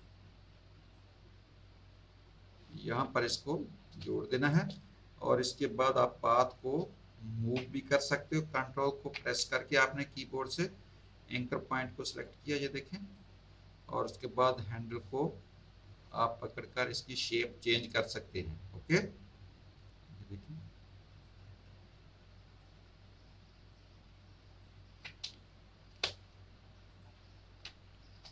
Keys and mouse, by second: 0.0 click, 2.7 click, 4.0 space, 4.1 click, 11.0 ctrl+click, 14.5 ctrl+click, 17.8 ctrl+click, 21.2 ctrl+click, 23.7 ctrl+click, 25.2 space, 25.4 click, 26.9 ctrl+click.